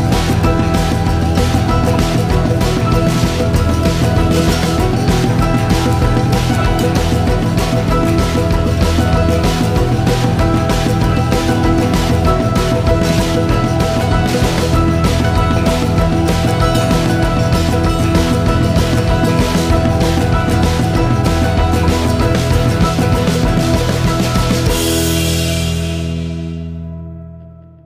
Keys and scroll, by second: 5.3 ctrl+s, 11.0 g, 16.3 g.